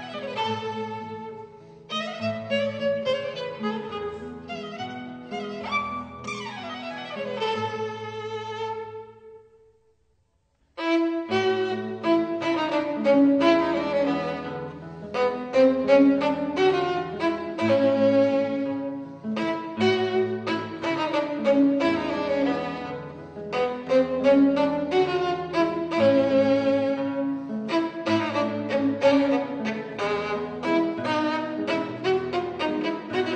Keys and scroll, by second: 0.6 super+z, 9.5 e, 9.8 super+z, 14.6 super+z, 15.7 super+z, 16.4 super+z.